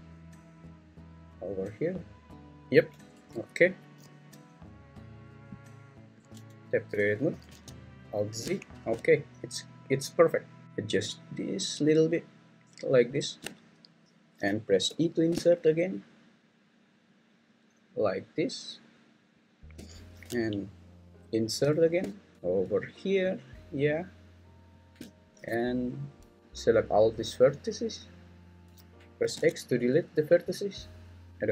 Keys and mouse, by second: 2.8 click, 3.1 Tab, 6.3 Tab, 6.9 `, 7.5 alt+z, 8.5 shift+middle click, 10.6 shift+s, 13.2 shift+click, 14.9 i, 19.4 shift+click, 21.1 i, 24.8 shift+click, 26.5-28.0 drag, 29.4 x, 31.3-31.5 drag.